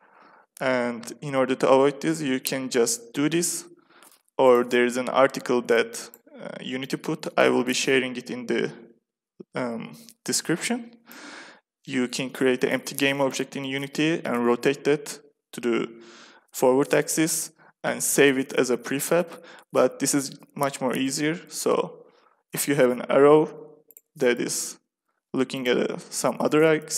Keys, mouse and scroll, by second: 2.5 r, 5.7 click, 6.0-8.7 drag, 23.1 r, 24.2 click, 24.8 r, 26.7 KP_1.